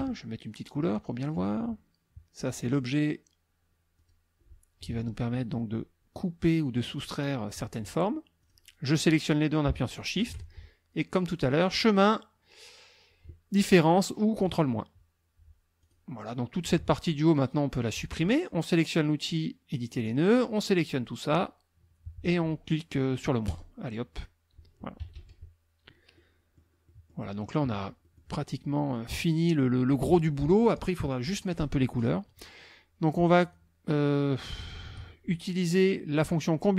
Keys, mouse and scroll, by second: 1.2 click, 2.6 click, 4.0 click, 8.4 click, 10.0 shift+click, 11.5 click, 14.4 click, 15.8 click, 19.7 click, 20.4-21.5 drag, 23.5 click, 25.0 KP_Subtract, 26.2 click, 26.9 click, 28.0 click, 33.4 shift+click, 34.6 shift+click.